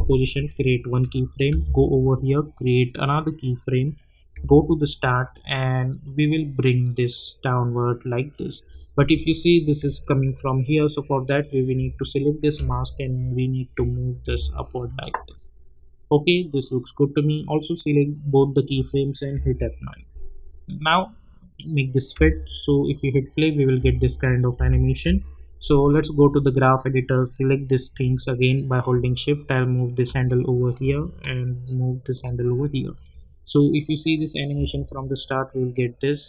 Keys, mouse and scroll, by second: 0.4 click, 1.5 k, 2.9 click, 4.3 j, 5.3-9.2 drag, 9.2 alt+scroll up 1, 11.3 click, 12.6 Up, 17.1-19.3 drag, 19.3 F9, 20.6 click, 22.1 space, 24.6 j, 25.0 j, 26.0-30.7 drag, 30.7-33.0 drag, 33.0 click, 34.5 space.